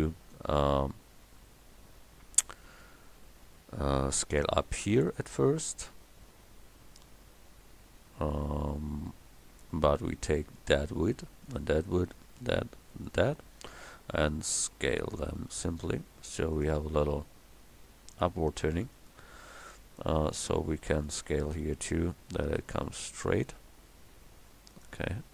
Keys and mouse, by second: 3.6 middle click, 4.9-9.4 right drag, 13.7-16.6 middle drag, 14.8 s, 18.2 middle click, 19.5 middle click, 21.6 s.